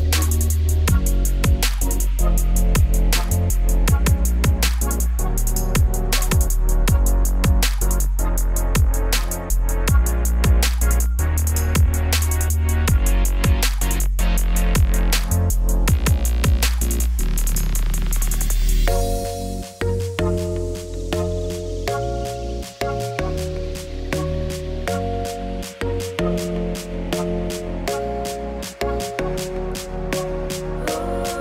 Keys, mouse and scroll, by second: 0.5-1.2 scroll up 1, 1.2 scroll down 2, 3.9 z, 4.1 click, 5.0 shift+right click, 5.7 shift+a, 6.0 Tab, 6.2 s, 6.9 Tab, 7.0 g, 8.5 Tab, 8.7 s, 9.1 Tab, 9.3 g, 10.2 Tab, 10.6 middle click, 11.1 scroll up 2, 11.2 2, 11.3 click, 11.6 g, 13.2 3, 13.3 click, 13.6 e, 14.8 click, 15.0 g, 15.7 Tab, 15.9 middle click, 16.0 ctrl+s, 17.0 click, 17.8 middle click, 18.0 scroll up 3, 18.2 shift+middle click, 18.6-19.4 scroll down 1, 19.4 click, 19.9 ctrl+z, 20.4-25.7 drag, 25.7-26.2 scroll down 1, 26.2 KP_0, 26.5 scroll down 1, 26.6 z, 27.7-28.6 scroll up 1, 28.6 scroll up 1, 28.8-31.0 drag.